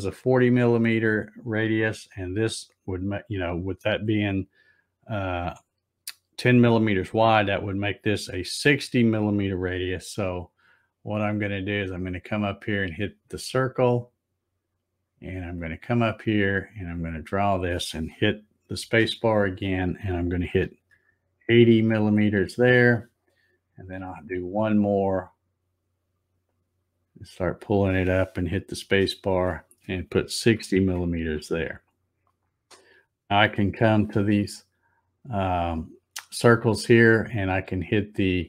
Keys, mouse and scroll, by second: 12.6 click, 15.5-19.0 drag, 18.8 space, 26.5-28.9 drag, 28.8 space, 32.9-33.3 scroll up 2.